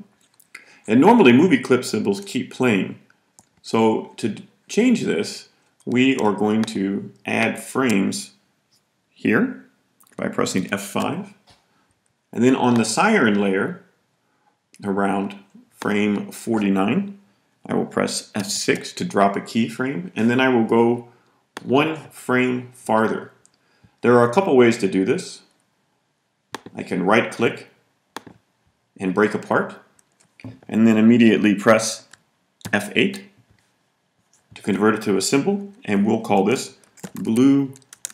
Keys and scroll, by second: 10.5 F5, 18.3 F6, 32.5 F8, 36.5-38.1 typing.